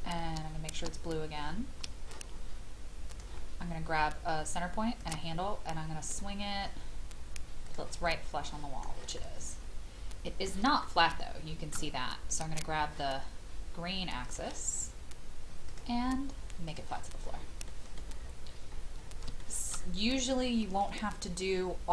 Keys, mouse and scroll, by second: 3.0 shift+click, 5.0 shift+click, 6.1-7.7 scroll up 1, 7.7 click, 8.0-10.6 middle drag, 10.9 shift+middle click, 14.2 click, 17.1-17.7 scroll down 1, 17.7 middle click, 18.0-19.3 scroll down 1, 19.4 shift+middle click, 19.7-20.1 scroll down 1.